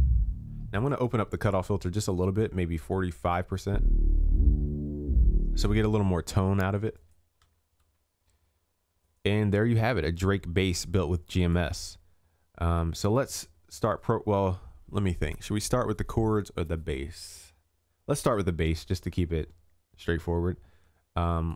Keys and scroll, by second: 7.6 ctrl+s.